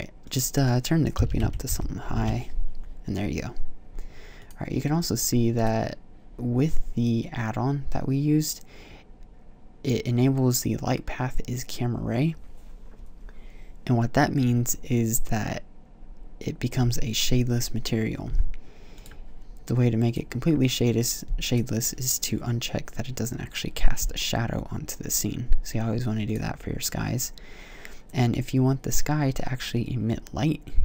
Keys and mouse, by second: 1.6 KP_0, 5.6 middle click, 6.1-7.4 drag, 7.4-18.7 middle drag, 18.7-23.0 drag.